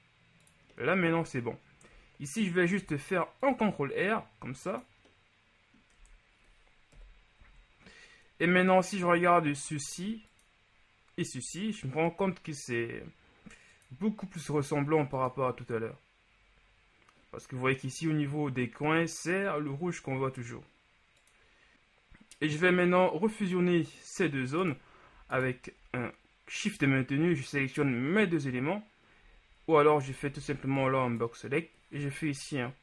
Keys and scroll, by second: 2.9 ctrl+r, 6.1 Tab, 7.0 KP_1, 7.5 a, 21.8 Tab, 30.6 b.